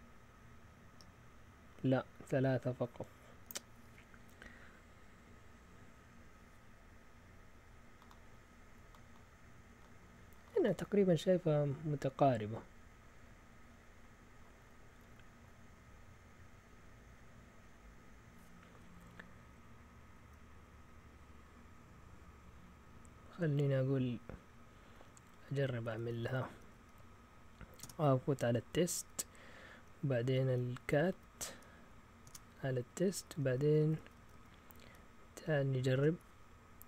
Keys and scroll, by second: 26.1 Up, 26.3 Up, 26.5 Up, 26.7 Up, 27.8 Return, 28.7 Up, 29.0 Up, 29.6 Up, 30.2-31.1 typing, 32.2-33.6 typing, 33.8 Up, 33.9 Up, 34.1 Up, 34.9 Left, 35.5 Left, 35.6 Left, 36.0 Right.